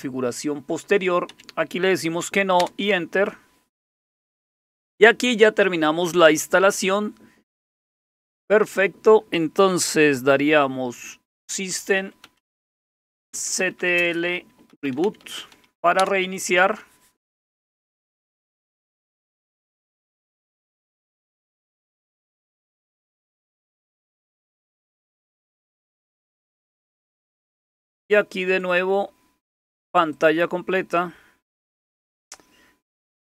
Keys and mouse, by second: 1.3 Down, 2.6 Return, 11.2-16.0 typing, 28.6-32.3 drag.